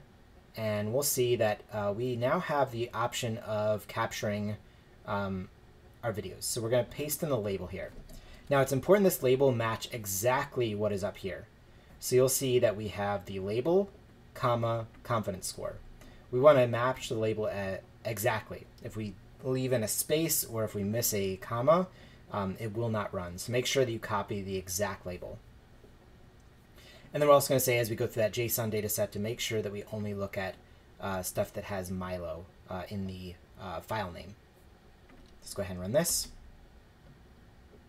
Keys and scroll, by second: 8.5 super+v, 36.1 shift+Return.